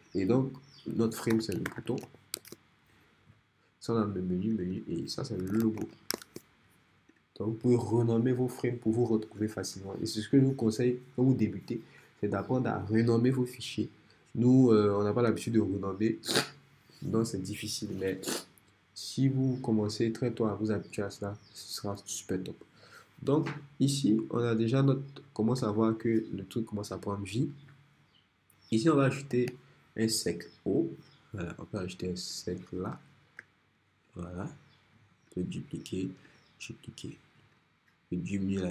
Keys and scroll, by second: 1.1-2.6 typing, 5.3-6.3 typing, 25.6 r, 29.3 o.